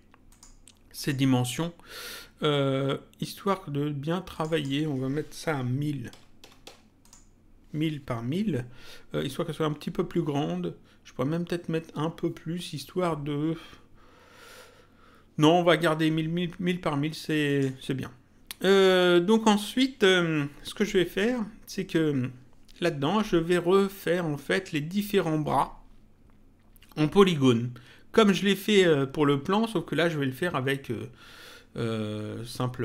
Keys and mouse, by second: 4.3 click, 7.0 click, 17.4 click.